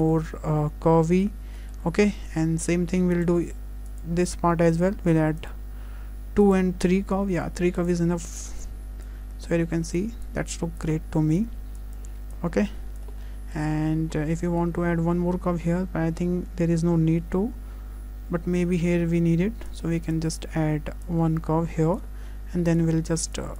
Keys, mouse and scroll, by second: 1.2-2.2 scroll up 4, 1.6 shift+middle click, 2.2 shift+middle click, 3.2 click, 3.9 click, 6.4 click, 7.8 click, 9.1 click, 10.3 click, 10.8 click, 11.8 click, 13.0 click, 13.2 shift+middle click, 13.8-14.1 scroll down 2, 14.2 scroll up 1, 14.5 shift+middle click, 18.4-18.8 scroll up 2, 19.7 click, 20.0 click, 22.7 click, 23.4 click.